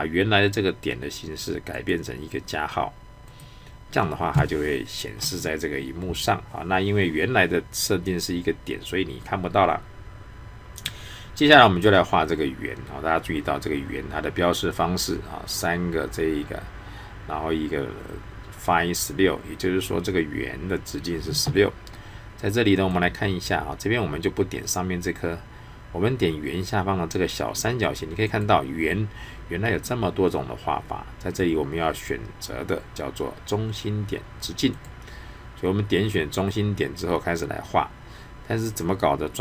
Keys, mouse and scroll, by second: 1.7 click, 22.7 click, 27.8 click, 34.7 click.